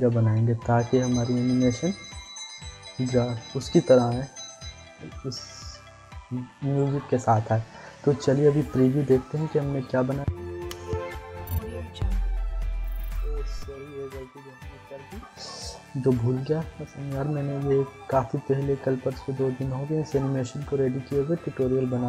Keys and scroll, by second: 10.1 Insert, 13.5 space.